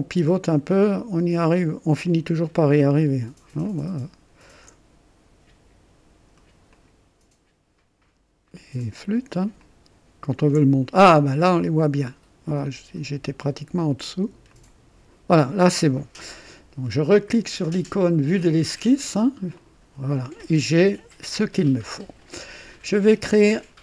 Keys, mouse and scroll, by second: 2.0 click, 3.7 ctrl+alt+click, 6.7 click, 8.7 click, 9.6 ctrl+alt+click, 10.6 ctrl+alt+right click, 14.5 click, 19.5 click.